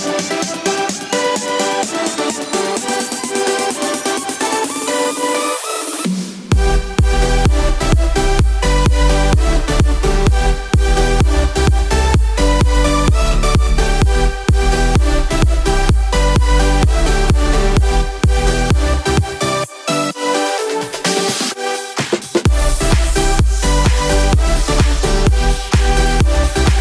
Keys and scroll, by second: 3.1-3.9 typing, 16.7 2, 16.9 Return.